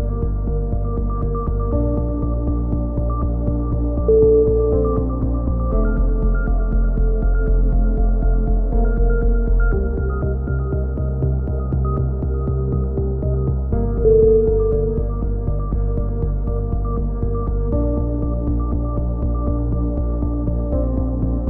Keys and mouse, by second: 2.4 right click, 2.7 click, 3.6 right click, 4.2 e, 4.4 z, 5.5 s, 5.9 ctrl+z, 6.1 s, 6.9 ctrl+z, 6.9 s, 7.6 click, 8.0 a, 8.4-10.1 right drag, 8.4 z, 10.1 click, 10.7 middle click, 11.2 a, 11.4 z, 11.6 a, 11.8 a, 11.9 click, 15.1 click, 15.1 right click, 15.7 click, 16.1 a, 18.4 ctrl+z, 18.6 ctrl+z, 19.9 KP_7, 20.1 z, 20.9 ctrl+z, 21.0 ctrl+z.